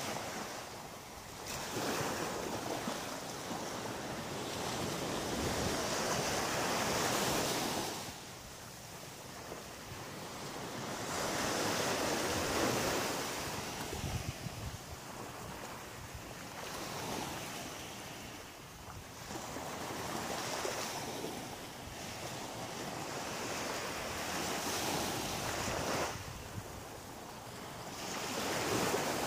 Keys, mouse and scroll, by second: 0.0 click, 0.5 click, 0.9-1.5 scroll down 1, 1.5 scroll down 3, 2.1 middle click, 3.0 scroll up 2, 4.5 shift+right click, 5.1 shift+right click, 6.6 shift+right click, 7.0 shift+right click, 7.4 shift+right click, 7.8 shift+right click, 8.8 shift+right click, 9.3 shift+right click, 9.7 shift+right click, 10.2 shift+right click, 11.4 shift+right click, 12.3 shift+middle click, 13.5 shift+right click, 14.7 middle click, 16.4 g, 17.7 click, 18.0 middle click, 19.7 shift+right click, 20.2 shift+right click, 20.7 shift+right click, 21.2 shift+right click, 21.8 shift+right click, 22.4 shift+right click, 23.2 shift+right click, 23.8 shift+right click, 24.3 shift+right click, 24.9 shift+right click, 25.4 shift+middle click, 26.3 middle click, 29.1 shift+right click.